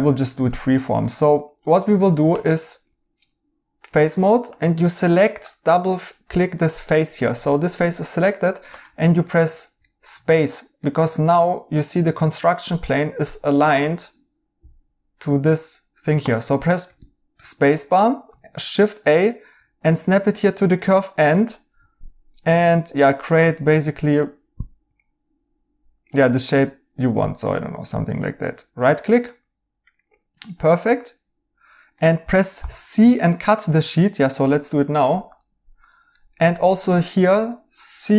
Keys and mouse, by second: 0.7 Escape, 1.0 right click, 2.2 Tab, 5.8 right click, 7.3 right click, 9.2 right click, 16.6 right click, 18.2 a, 28.4 right click, 32.5 c, 36.1 right click.